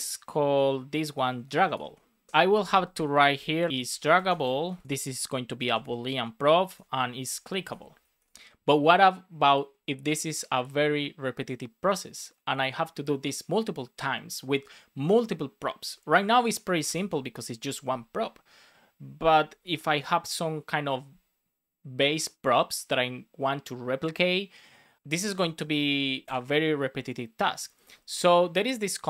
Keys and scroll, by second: 0.4 Right, 0.9 BackSpace, 1.5 BackSpace, 2.3 Left, 3.8 shift+d, 4.8 space, 5.0 Up, 5.4 Left, 7.2 shift+c, 16.1 Left, 16.8 alt+shift+Left, 19.3 Up, 25.1 Down, 26.0 super+Right, 26.2 shift+super+Left, 27.6 Up, 28.5 Return, 28.8 Up.